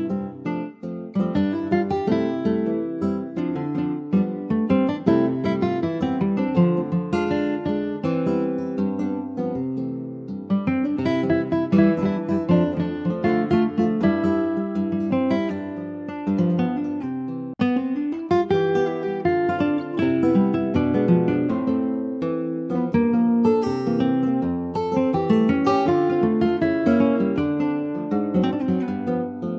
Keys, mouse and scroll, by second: 0.0 click, 1.2 Tab, 1.6 click, 2.3 Tab, 2.7 click, 3.5 alt+z, 4.4 alt+middle click, 5.7 alt+middle click, 6.0 alt+z, 6.6 middle click, 7.2 click, 9.6 middle click, 10.0 Tab, 10.3 click, 10.5 scroll down 3, 10.8 middle click, 11.6 ctrl+s, 11.6 click, 12.0 scroll down 2, 12.1-13.2 middle drag, 13.2-13.6 ctrl+scroll down 2, 13.7 middle click, 14.1 ctrl+s, 14.2 click, 14.8 a, 15.6 ctrl+s, 16.9 ctrl+a, 19.0 ctrl+j, 19.4 click, 19.8 middle click, 20.0 scroll up 1, 20.2 ctrl+s, 20.4 click, 20.7 alt+middle click, 21.0 alt+middle click, 21.9 click, 22.4 middle click, 22.9 ctrl+s, 23.0 click, 23.4-24.5 middle drag, 24.5 ctrl+s, 24.6 click, 25.8 shift+d, 27.6 click.